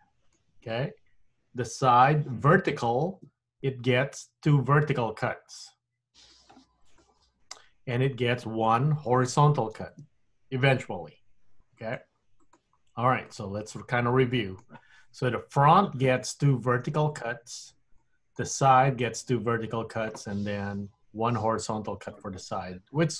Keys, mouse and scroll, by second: 3.2 ctrl+r, 9.8 ctrl+r, 13.4 middle click, 18.1 middle click, 23.0 middle click.